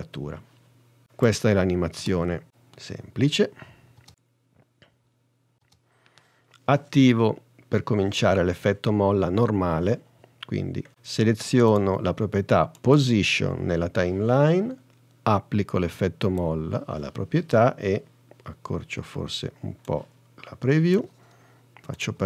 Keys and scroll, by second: 2.1 space, 5.7 space.